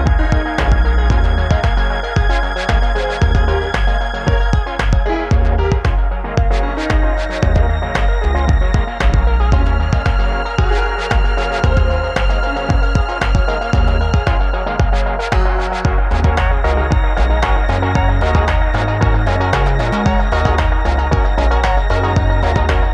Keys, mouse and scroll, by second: 0.2 alt+scroll down 1, 0.8-1.2 click, 1.2 alt+scroll up 1, 1.6-2.7 click, 2.8-3.3 alt+scroll down 1, 3.6 click, 4.7-5.2 alt+scroll up 1, 6.4-7.5 click, 7.5 alt+scroll down 1, 9.2-9.5 alt+scroll down 1, 9.7-10.8 alt+click, 10.9-11.4 alt+scroll up 2, 11.4 space, 11.5-11.8 click, 11.8-12.2 alt+scroll up 2, 12.2-13.7 drag, 13.7-14.0 alt+scroll down 2, 15.4-16.8 alt+drag, 17.2 alt+scroll down 1, 19.1-22.8 drag.